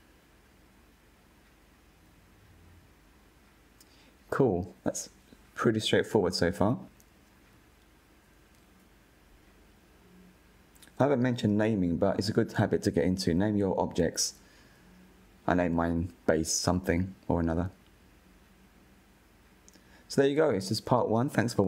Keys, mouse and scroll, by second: 0.2 /, 0.4 middle drag, 0.5 Tab, 0.7 2, 0.8 alt+click, 1.1 f, 1.3 middle click, 1.4 scroll up 1, 1.6 ctrl+b, 2.7 middle click, 2.9 ctrl+r, 3.6 click, 3.8 click, 4.0 middle click, 4.2 alt+click, 4.5 g, 5.0 middle click, 5.3 3, 5.3 click, 5.6 i, 6.3 click, 6.7 Delete, 7.0 Tab, 7.2-7.6 middle drag, 7.6 click, 7.7 Tab, 7.9 middle click, 8.1 Tab, 8.3-8.9 scroll down 3, 8.4 click, 8.6 /, 8.9-9.3 drag, 9.8-10.4 scroll down 1, 10.4 click, 10.6-13.0 drag, 13.4 scroll down 1, 13.6-15.5 shift+middle drag, 15.5-16.9 drag, 16.9 KP_Decimal, 17.8 click, 18.2-21.3 middle drag.